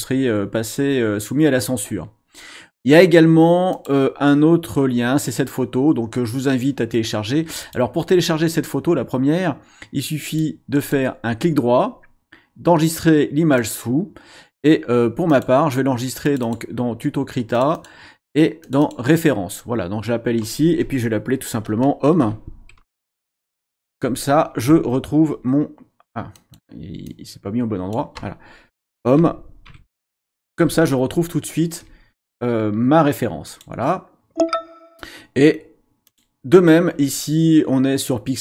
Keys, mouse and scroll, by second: 3.7 click, 7.6 click, 10.3 click, 10.7 right click, 13.5 click, 15.3 click, 16.2 click, 17.5 click, 18.6 click, 22.2-24.1 typing, 26.3 click, 27.1 click, 29.1-30.8 typing, 33.5 click, 36.1 click.